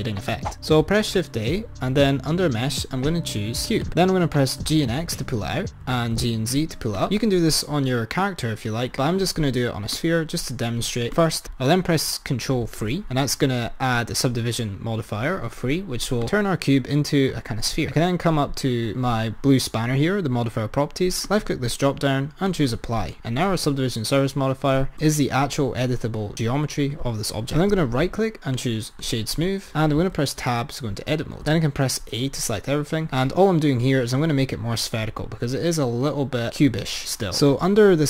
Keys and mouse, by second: 1.1 shift+a, 4.5 g, 5.9 g, 10.6 click, 11.3 click, 12.9 ctrl+3, 16.3 click, 18.0 click, 21.3-24.3 drag, 24.9 Tab, 27.7-30.0 right drag, 30.0 Tab, 31.5 a.